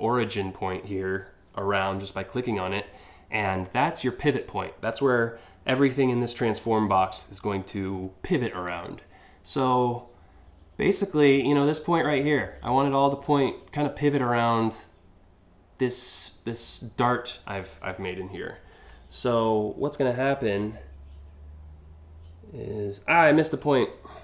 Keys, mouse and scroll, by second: 19.8-22.9 drag, 24.1 ctrl+z.